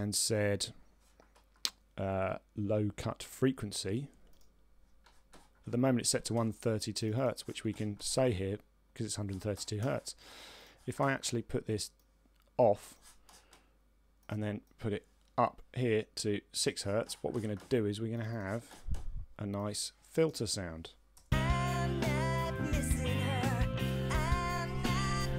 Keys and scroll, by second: 20.9 Return.